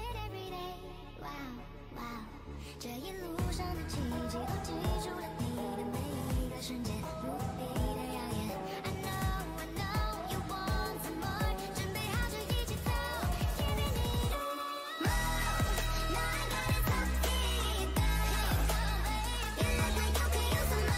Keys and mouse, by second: 0.3 ctrl+z, 1.2 ctrl+z, 10.8-12.2 right drag, 13.4 ctrl+z, 16.2-17.8 right drag, 18.4 ctrl+z, 19.7 ctrl+e.